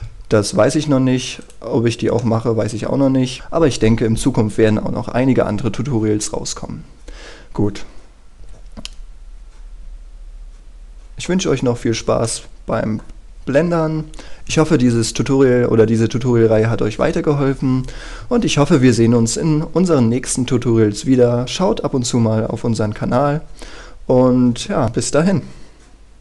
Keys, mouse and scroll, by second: 1.6 right click, 2.0 scroll up 1, 2.4 middle click, 3.2 scroll up 1, 3.4 middle click, 8.4 KP_0, 8.6 F12, 11.4-12.0 scroll up 1, 12.0-12.4 scroll down 1, 12.4-13.5 middle drag.